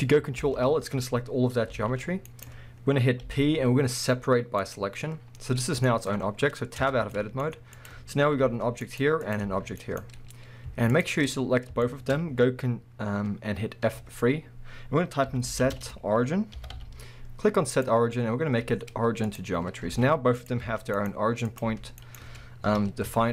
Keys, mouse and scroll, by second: 0.4 ctrl+l, 1.4 scroll down 1, 1.7 g, 2.5 right click, 3.3 p, 5.0 scroll down 1, 5.6-7.8 middle drag, 6.8 Tab, 7.8 click, 8.4 g, 9.0 right click, 9.2 click, 9.4 g, 10.0 right click, 11.0 shift+click, 11.8-20.4 shift+middle drag, 13.9 F3, 19.6-19.9 scroll down 2, 19.9 alt+a, 20.4 click, 20.6 g, 21.1 right click, 21.5 click, 21.7 g, 22.1 right click, 22.7 KP_1, 23.1 alt+a.